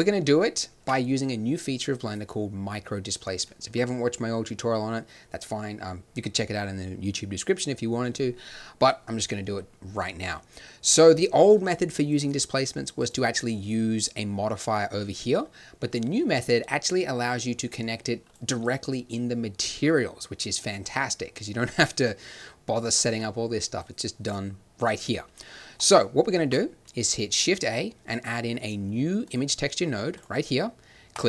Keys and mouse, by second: 0.0 shift+z, 0.8 Tab, 14.8 middle click, 17.5-19.5 drag, 19.5-23.7 middle drag, 23.7-25.6 drag, 25.6 middle click, 25.7-26.3 drag, 26.3 shift+a, 31.1 click.